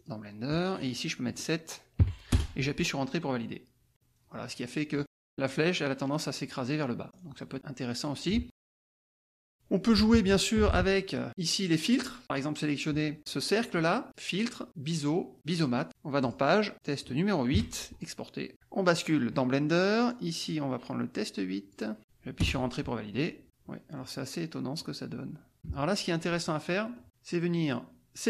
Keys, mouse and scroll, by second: 0.0 click, 0.5 click, 2.0 KP_7, 2.3 Return, 4.1 scroll down 2, 4.3-7.1 drag, 7.1-7.5 scroll down 2, 7.5 click, 8.3 alt+Tab, 9.2-9.9 scroll down 1, 9.9 KP_Subtract, 10.6 F1, 10.9 click, 12.2 click, 14.0 click, 15.6 click, 16.2 click, 16.7 click, 17.5 KP_8, 18.5 alt+Tab, 20.0 click, 20.5-21.9 drag, 22.0 KP_8, 22.4 Return, 23.4 click, 24.1-24.7 scroll up 1, 24.7 click, 25.5 KP_Subtract, 26.4 click.